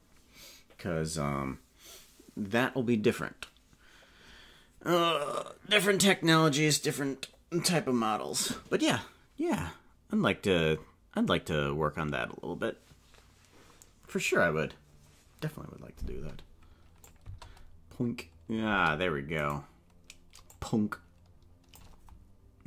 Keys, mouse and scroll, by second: 17.0 click, 17.2 space, 18.8 space, 19.5 right click, 20.5-21.9 drag.